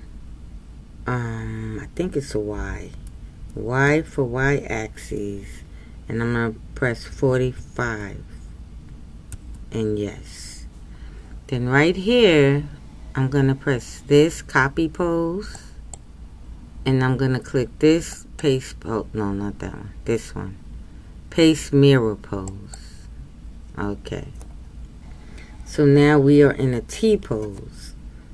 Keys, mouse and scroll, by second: 18.4-28.3 drag.